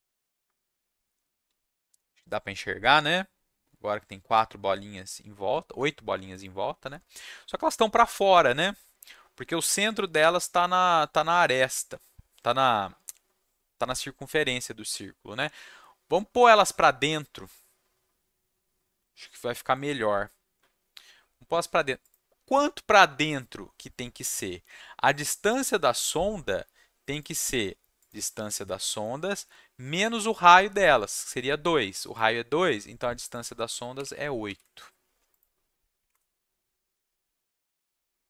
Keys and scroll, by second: 34.4 ctrl+s, 35.9 Up, 36.1 Return.